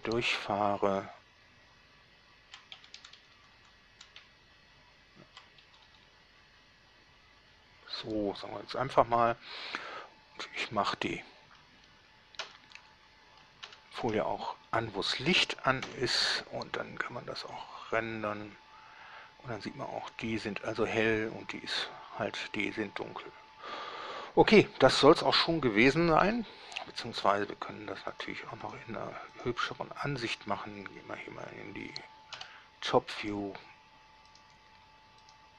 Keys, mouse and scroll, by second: 0.2 Right, 0.4 Right, 0.6 Right, 1.1 Right, 3.0 Left, 3.2 Left, 3.6 Left, 3.8 Left, 4.4 Right, 5.0 Right, 5.1 Right, 5.9 Left, 6.1 Left, 6.3 Left, 6.6 Left, 6.8 Left, 12.7 shift+0, 13.9 alt+shift+0, 16.1 F12, 23.7 scroll down 2, 24.3 scroll up 2, 26.6 Escape, 28.4 click, 29.0 click, 29.6 click, 30.6 click, 31.1-31.4 scroll down 1, 32.0 scroll up 1, 32.6 7, 33.6 right click, 34.6 right click.